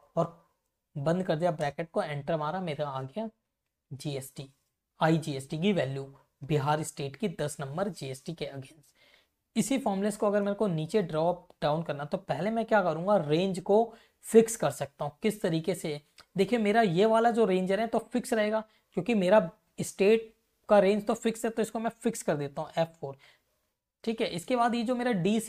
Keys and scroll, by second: 0.8 shift+0, 1.5 Return, 2.2 Up, 2.5 Left, 10.1 shift+Right, 11.3 Left, 12.5 F2, 14.3 Left, 15.2 Left, 17.2 shift+Right, 22.9 F4, 23.7 Right.